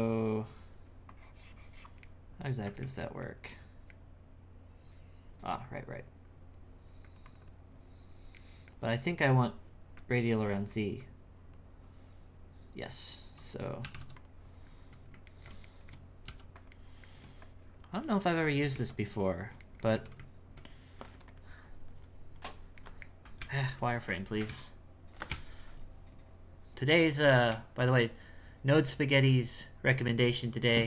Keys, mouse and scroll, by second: 0.0-2.1 drag, 2.1 middle click, 2.8 ctrl+z, 3.0-6.5 middle drag, 7.0-8.4 drag, 8.4-10.0 middle drag, 10.0 click, 11.0-14.2 drag, 15.3 ctrl+middle click, 16.3 f, 16.7 middle click, 17.4-18.7 shift+drag, 18.7 ctrl+2, 19.7 middle click, 19.9 z, 21.7-22.8 drag, 22.8 middle click, 23.4 z, 24.3 ctrl+middle click, 24.5 z, 25.3 space.